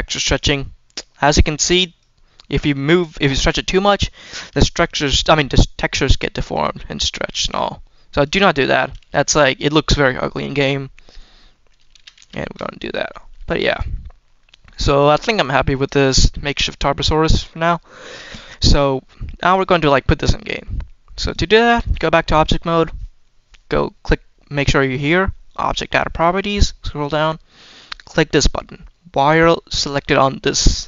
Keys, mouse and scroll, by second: 0.2-1.2 drag, 1.8 click, 2.7-3.4 scroll down 1, 3.4 scroll down 1, 3.6 shift+middle click, 3.8-4.5 shift+scroll up 5, 4.6 shift+middle click, 6.3 scroll down 3, 7.4 click, 8.7 ctrl+z, 10.4 scroll down 1, 10.6 middle click, 11.9 ctrl+z, 12.1 ctrl+z, 12.5 middle click, 13.0 middle click, 13.4 shift+middle click, 13.8 middle click, 14.3 scroll up 2, 14.6 middle click, 15.3 scroll down 1, 15.7-17.4 middle drag, 19.3 click, 19.8 shift+middle click, 21.1-21.8 drag, 26.2-27.2 scroll down 2, 30.3 click.